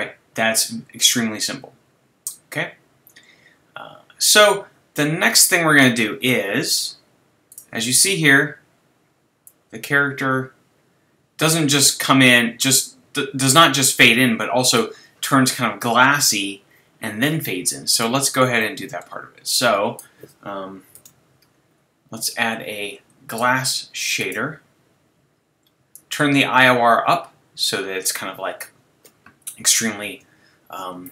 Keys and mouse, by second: 18.6 click, 19.5-20.0 right drag, 20.0 click, 20.9 shift+a, 25.9 right click, 26.6 click, 27.0 middle click, 30.1 shift+a.